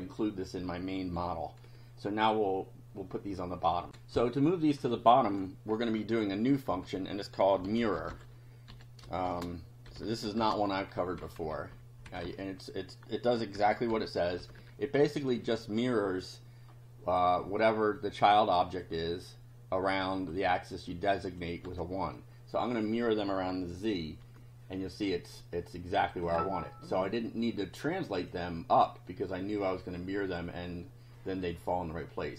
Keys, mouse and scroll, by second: 3.9 ctrl+r, 5.8 Home, 6.7 Home, 7.4-10.9 typing, 11.0 shift+Delete, 12.1 BackSpace, 13.3-15.1 typing, 18.0 click, 20.2 click, 20.9 click, 21.6 1, 24.2 F5, 25.0-26.4 drag, 28.0 click, 30.0 click, 31.2 click, 31.8-32.3 drag.